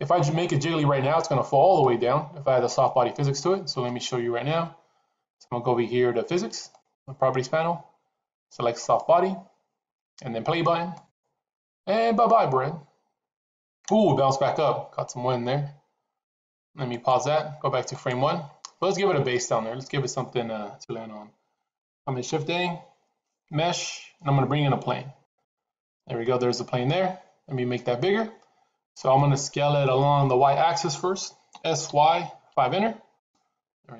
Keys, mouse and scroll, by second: 6.6 click, 8.8 click, 10.8 click, 16.8 click, 17.8 click, 22.2 shift+a, 26.1-28.8 middle drag, 31.4 s.